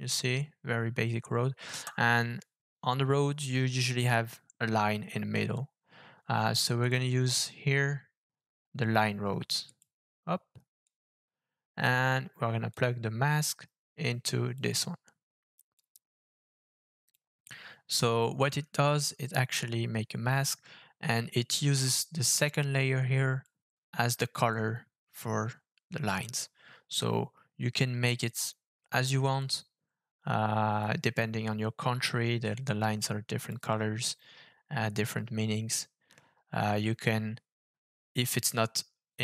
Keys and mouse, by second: 1.7 KP_0, 6.8-9.8 drag, 10.8-11.8 drag, 12.7-14.6 drag, 15.8-17.1 drag, 22.3-23.4 drag.